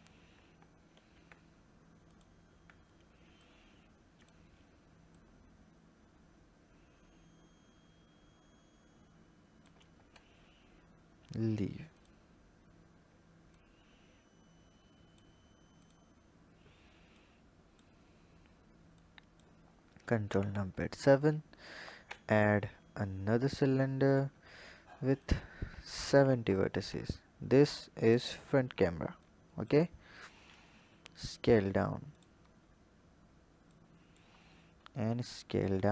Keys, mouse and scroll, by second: 0.9 ctrl+b, 3.3-8.1 drag, 9.8 Tab, 10.7-11.3 scroll down 2, 11.3-11.8 scroll down 5, 11.8 click, 13.4 click, 15.7 click, 16.2-17.1 scroll down 2, 17.1 click, 17.9-18.8 scroll down 5, 18.8-20.1 drag, 20.1 ctrl+KP_7, 21.5-22.0 scroll down 1, 22.0 shift+a, 25.1-26.5 drag, 27.4 click, 29.1 click, 29.9-30.4 scroll up 1, 30.4 s, 32.1 click, 32.4 scroll up 3, 33.6 click.